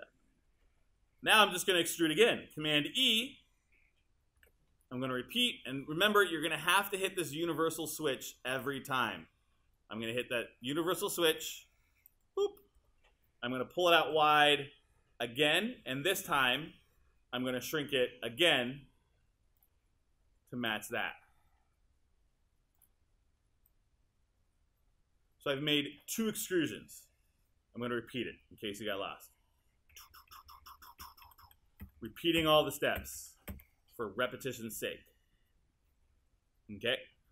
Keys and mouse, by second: 4.4 super+e, 30.0 super+z.